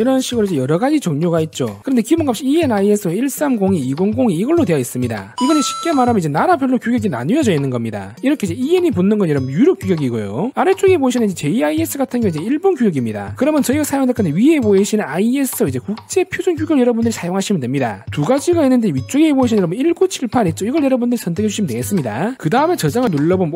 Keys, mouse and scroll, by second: 0.5 click, 22.1 click.